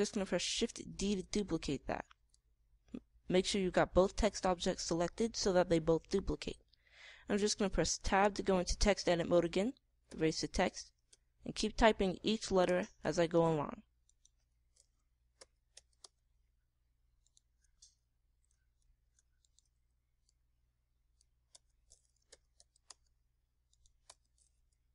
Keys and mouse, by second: 1.9 shift+d, 7.2-9.0 right drag, 9.0 Tab, 11.0 BackSpace, 12.0 a, 13.6 Tab, 15.7 Tab, 16.3 BackSpace, 16.7 a, 17.0 Tab, 19.8 shift+d, 21.2 click, 22.5 Tab, 23.3 BackSpace, 23.5 z, 23.8 Tab, 24.6 right click.